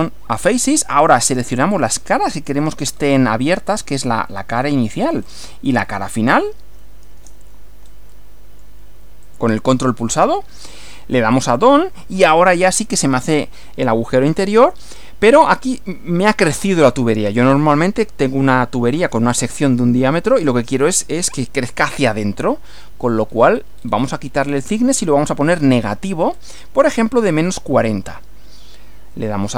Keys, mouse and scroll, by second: 0.9-1.4 scroll up 1, 2.3 shift+click, 2.9 shift+scroll down 1, 4.3 middle click, 5.2 scroll up 1, 6.1 shift+click, 7.9 scroll up 2, 8.1-8.8 middle drag, 9.3 ctrl+click, 9.8-10.2 ctrl+scroll down 2, 11.3 click, 13.9-14.6 middle drag, 14.7-15.5 scroll down 4, 22.1 click, 23.0-23.6 scroll down 2, 23.7-24.2 scroll down 2, 24.9 scroll down 2, 26.0-26.7 scroll down 4, 26.9 scroll down 2.